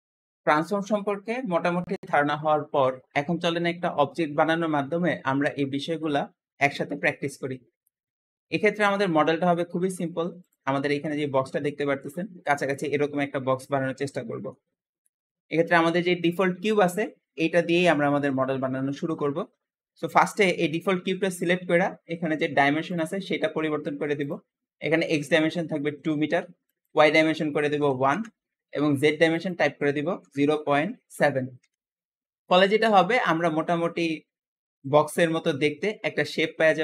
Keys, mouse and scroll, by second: 8.5-8.9 scroll down 2, 9.1-9.6 shift+middle drag, 9.6-10.3 scroll down 2, 10.3 click, 10.7-11.1 shift+middle drag, 11.1 g, 13.9-14.8 shift+middle drag, 14.8-15.4 scroll up 4, 15.4 click, 20.1-22.8 shift+middle drag, 22.8-24.2 drag, 26.5-32.2 drag, 32.8-36.3 shift+middle drag.